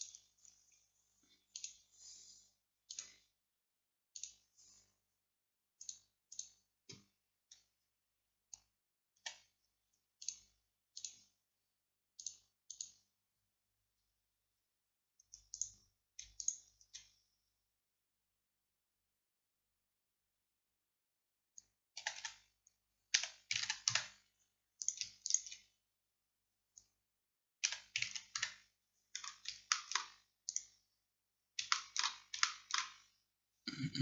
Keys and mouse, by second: 9.2 a, 22.1 a, 22.3 a, 23.2 r, 27.7-29.8 middle drag, 27.7 r.